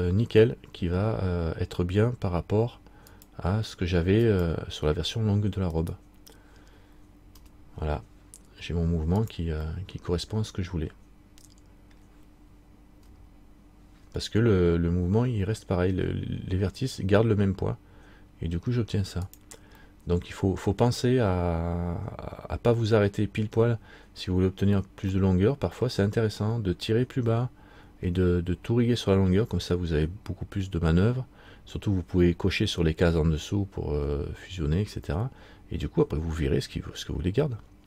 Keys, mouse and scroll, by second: 1.0 middle click, 3.2 click, 5.9 right click, 7.5 r, 9.8 middle click, 13.2 r, 20.0 middle click, 25.3 middle click.